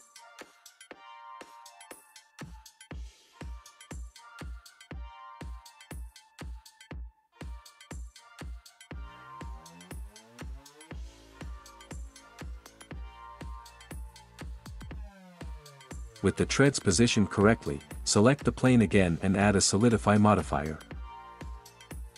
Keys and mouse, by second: 3.8 click, 4.4 click, 4.9 click, 5.3 click, 5.5 click, 10.3 ctrl+s, 12.5 click, 15.1 click, 16.5 click, 17.5 click, 19.8-22.1 drag.